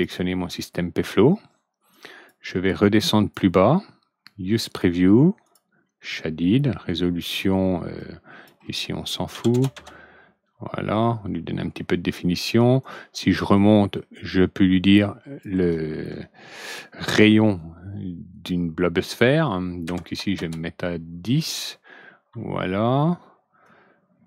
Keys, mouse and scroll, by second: 1.8 click, 2.7 click, 4.6 click, 5.4 click, 7.9 click, 9.2 ctrl+n, 12.7-13.3 drag, 14.8 click, 20.0 ctrl+n, 23.6 click.